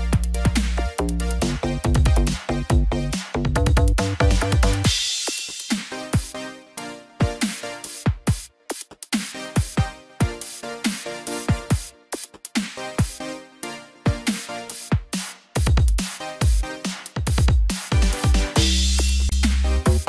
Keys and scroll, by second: 7.7 ctrl+t.